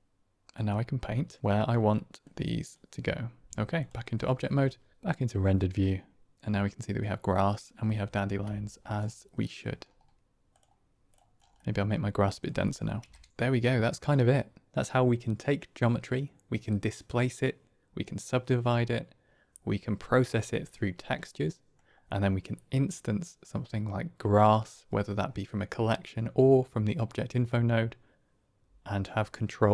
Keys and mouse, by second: 0.7 middle click, 1.9-3.5 middle drag, 3.5 ctrl+Tab, 4.2 shift+middle click, 5.3 click, 6.3-7.0 drag, 8.2 ctrl+space, 9.3 click, 10.5 click, 11.6 middle click, 13.3-13.7 middle drag, 14.1 middle click, 21.2-21.7 middle drag.